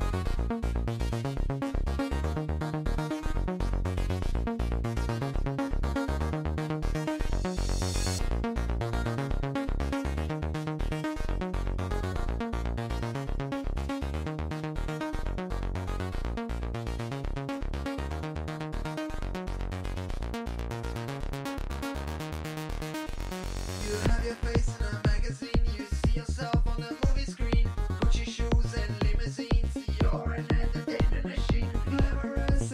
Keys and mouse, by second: 10.0 a, 11.1 click, 12.8-15.9 drag, 17.1-18.5 drag, 18.6-22.1 middle drag, 22.1-23.7 drag, 24.0-25.3 drag, 25.6 a, 27.4 click, 28.9 click, 29.3-30.7 drag, 31.5 a.